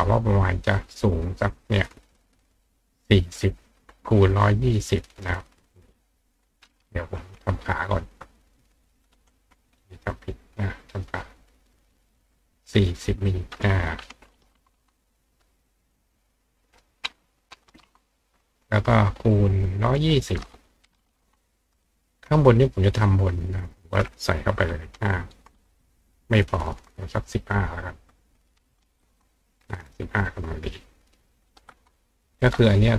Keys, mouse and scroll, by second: 0.3 click, 0.8 click, 4.2 click, 5.1-6.2 drag, 7.4 click, 8.9 click, 10.1 click, 10.8 click, 13.3 click, 16.6 click, 19.9 click, 23.6 click, 27.5 click, 30.5 click.